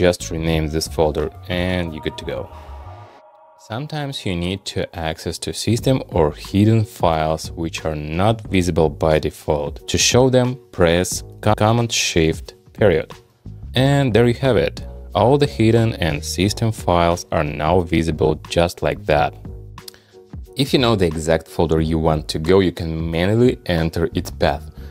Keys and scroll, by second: 12.7 shift+super+..